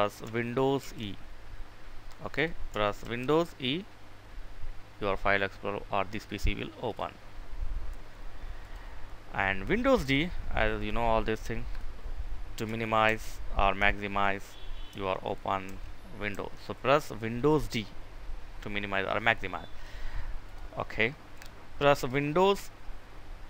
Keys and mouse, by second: 1.9 click, 2.7 super+e, 5.8 click, 12.7-14.7 typing, 16.2 d, 20.0 click.